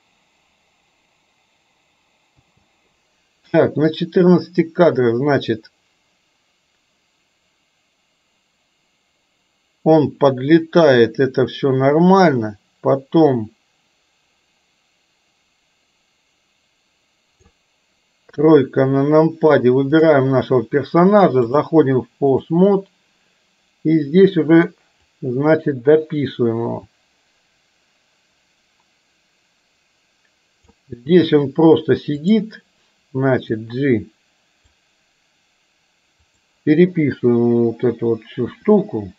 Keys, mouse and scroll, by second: 2.3 space, 3.9-17.6 drag, 18.3 KP_3, 21.4-22.6 drag, 25.2-30.8 drag, 32.2 click, 33.8-34.8 drag, 38.6 r.